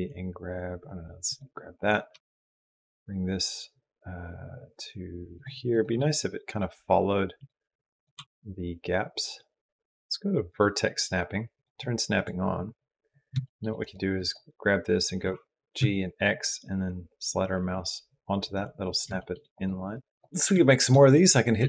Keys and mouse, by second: 1.5 click, 1.9 g, 5.5 click, 5.9 g, 8.1 g, 9.8-11.4 drag, 11.9 click, 13.2 shift+middle click, 13.6 click, 15.1 g, 19.0 shift+middle click, 19.8 click, 20.0 middle click, 20.2 n, 20.4 shift+middle click, 21.4 shift+d.